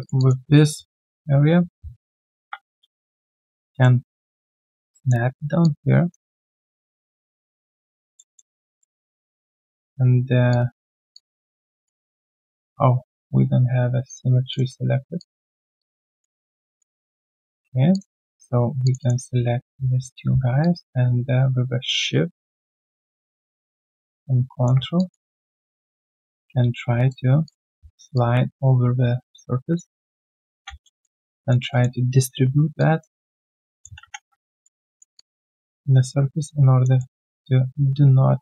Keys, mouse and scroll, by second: 0.0 alt+right click, 0.1 alt+click, 2.3 ctrl+shift+q, 8.1 alt+middle click, 11.1 alt+click, 14.5 double click, 15.5 alt+right click, 15.7 alt+click, 16.1 alt+middle click, 16.6 alt+click, 16.8 q, 17.3 right click, 18.8 shift+click, 19.3 scroll down 1, 20.6 ctrl+shift+click, 24.9 alt+click, 25.2 alt+middle click, 25.7 alt+click, 26.5 right click, 28.1 ctrl+shift+click, 30.8 alt+middle click, 31.0 alt+scroll down 1, 31.3 alt+click, 31.7 alt+middle click, 32.4 scroll down 1, 32.7 alt+click, 33.7 alt+middle click, 34.0 3, 34.3 right click, 35.1 alt+click, 36.9 alt+middle click, 37.3 alt+click.